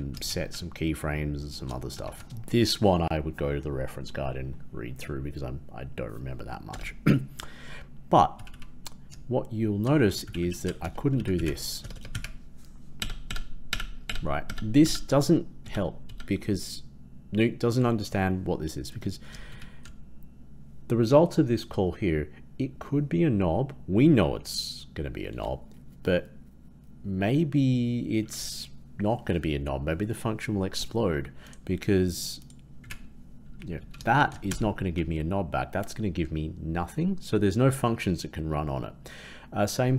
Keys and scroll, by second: 0.2 shift+Left, 10.1 shift+Right, 10.3 shift+Right, 34.4 ctrl+Return.